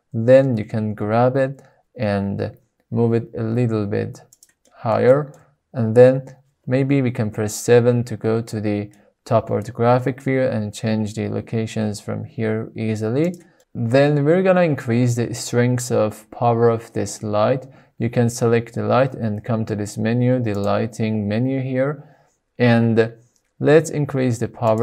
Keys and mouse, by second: 0.8 g, 2.0 z, 4.1 drag, 4.4-4.7 middle drag, 4.9 shift+middle click, 7.1 KP_7, 8.3-8.8 shift+middle drag, 10.5 g, 13.0 click, 13.5-14.2 middle drag, 14.4 middle click, 15.5-16.5 shift+middle drag, 20.6 click, 24.7-24.8 drag.